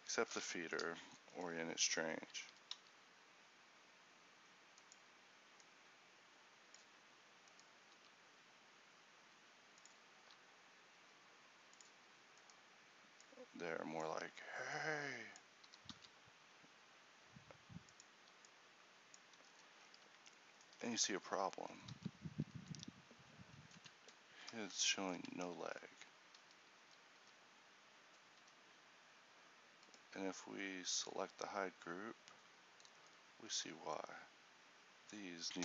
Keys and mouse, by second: 1.2-3.1 drag, 2.7 r, 3.1-5.9 right drag, 5.9-8.1 drag, 8.1-10.3 right drag, 8.1 g, 10.3 r, 13.6-15.8 middle drag, 15.8 r, 19.0-21.7 drag, 21.7 a, 22.1 z, 22.5 z, 25.5 Tab, 26.5 z, 26.9 a, 27.3 a, 29.9-31.7 drag, 29.9 a, 31.9 click, 32.1-33.7 drag, 33.7 a.